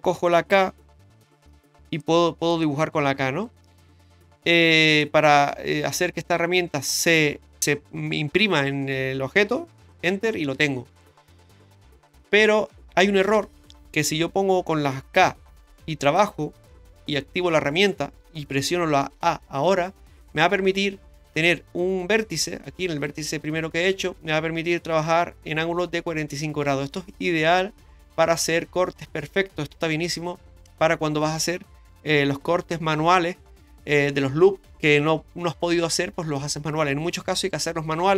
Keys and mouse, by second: 1.3 k, 12.7 shift+middle click, 15.2 k.